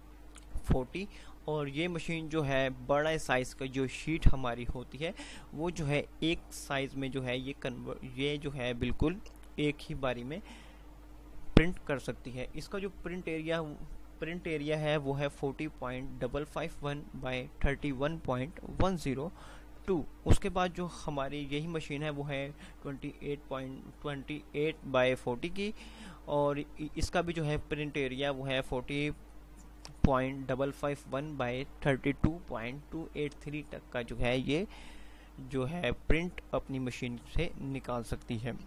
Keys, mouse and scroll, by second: 20.6 Page_Down, 21.1 typing.